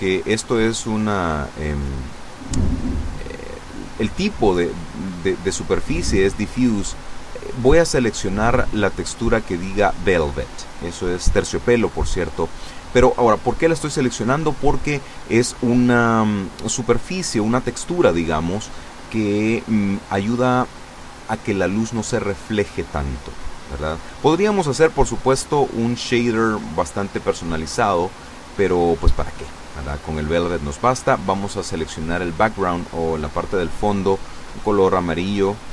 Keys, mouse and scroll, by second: 0.3 click, 1.1 click, 4.8 click, 12.6 click, 14.2-16.7 middle drag, 16.9 scroll down 1, 17.4 middle click, 19.4 click, 20.4 click, 22.5 click, 25.2 click, 26.3 click, 27.0-28.9 drag, 30.0 click, 31.0-33.9 drag.